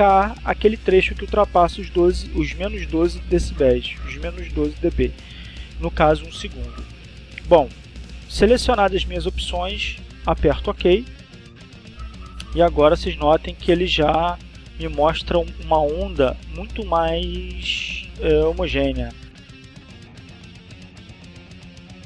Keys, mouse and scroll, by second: 11.9 click.